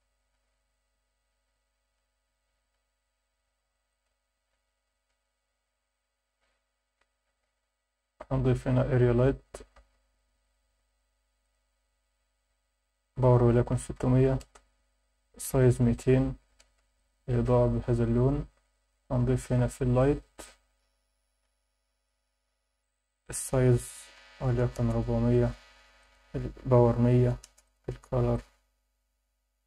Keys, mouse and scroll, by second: 2.6 click, 4.2 click, 5.2 KP_0, 5.6 KP_1, 5.9-6.4 scroll down 3, 7.1 shift+right click, 7.5 shift+a, 9.8 r, 10.4 click, 10.7 g, 11.4 click, 12.5-14.4 drag, 14.1 0, 15.0-16.6 drag, 15.9 0, 16.9 click, 18.8 shift+right click, 19.2 shift+a, 21.3 r, 22.0 click, 23.1-24.8 drag, 24.0 4, 24.2 4, 26.0-27.4 drag, 27.0 0, 27.6 click.